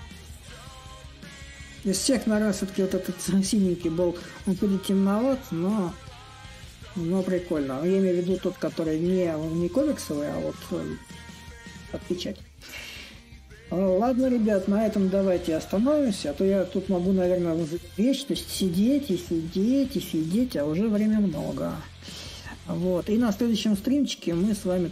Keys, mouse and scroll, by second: 0.0-5.0 drag, 5.2-10.2 drag, 11.4-14.3 drag, 14.3-16.3 right drag, 16.3-17.7 drag, 17.7-22.7 right drag, 23.8-24.9 drag.